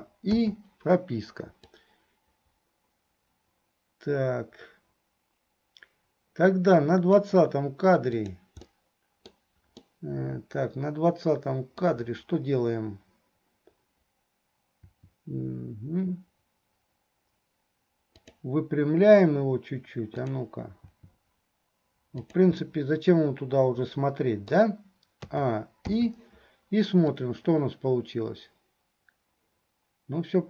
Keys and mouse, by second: 0.0 a, 0.6 i, 1.9-7.4 drag, 8.3 click, 8.8 click, 8.8 right click, 10.0 click, 10.0 right click, 10.4-12.1 middle drag, 14.8 r, 21.0 r, 22.7-24.8 middle drag, 25.5 a, 26.2 i, 27.3-30.4 drag.